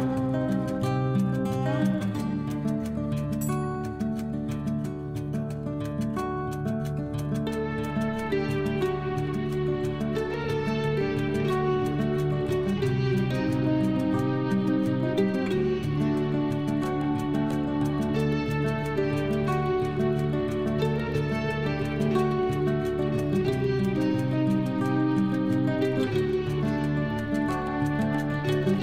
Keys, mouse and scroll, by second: 0.0-1.5 typing, 3.0 shift+0, 3.4 Return, 4.4-9.6 typing, 12.7-19.4 typing, 20.5-26.6 typing, 28.2-28.8 typing.